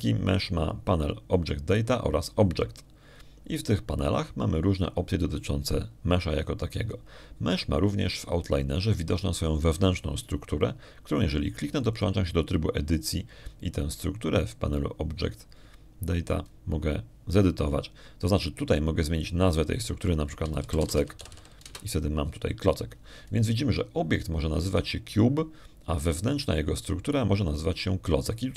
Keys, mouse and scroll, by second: 4.1 click, 6.0 click, 9.9 click, 13.8 click, 21.7 click, 22.5-23.2 typing, 23.5 Return.